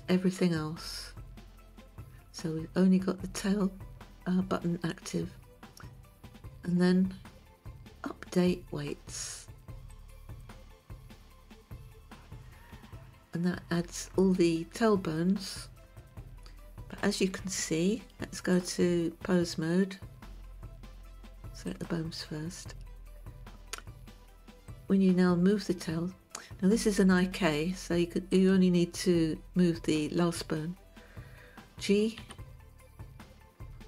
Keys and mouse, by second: 10.4 click, 16.7-17.5 shift+middle drag, 19.0-20.7 drag, 22.2 click, 25.3 click, 28.9 click, 32.7 g.